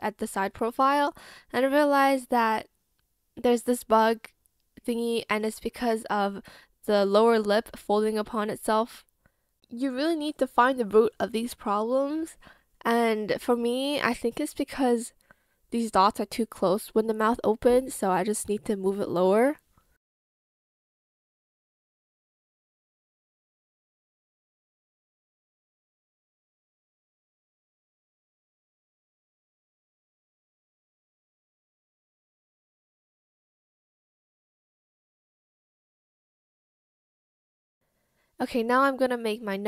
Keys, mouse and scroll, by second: 2.6 ctrl+z, 3.3 ctrl+z, 4.2 ctrl+z, 13.6 ctrl+z, 21.4 ctrl+z, 22.1 ctrl+shift+z, 23.4 shift+click, 25.4 ctrl+shift+z, 26.6 shift+click, 30.6 ctrl+z, 31.4 shift+click, 34.3 ctrl+z, 35.1 ctrl+s.